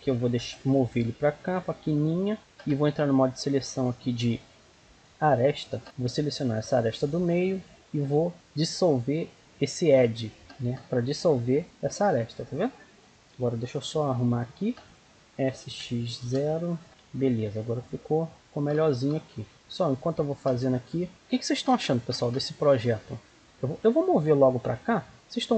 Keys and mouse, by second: 0.4 g, 0.8 middle click, 5.6-7.3 drag, 7.3 right click, 7.8 x, 11.3 z, 12.0 middle click, 13.1 z, 13.1 a, 13.8 b, 15.2 s, 16.9 right click, 17.3 g, 17.8 right click, 19.2 right click, 19.4 g, 19.5 g, 21.8-23.6 middle drag, 24.7 b.